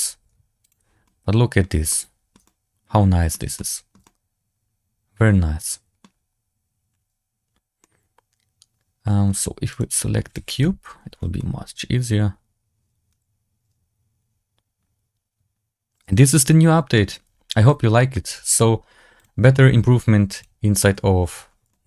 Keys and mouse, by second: 0.5 click, 0.9-1.5 middle drag, 1.8-2.2 shift+drag, 2.4-3.2 middle drag, 3.5-3.8 shift+drag, 4.0-5.9 middle drag, 7.7-9.2 middle drag, 9.6 right click, 10.5 KP_Decimal, 11.3-16.8 middle drag, 17.5-18.0 shift+middle drag, 19.1-20.3 drag, 21.6-21.8 middle drag.